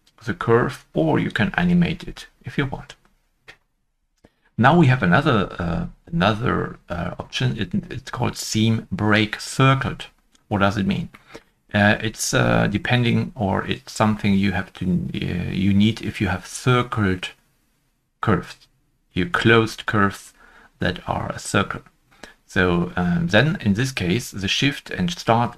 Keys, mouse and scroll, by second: 4.3 right click, 11.1 middle click, 11.1-14.3 scroll up 1.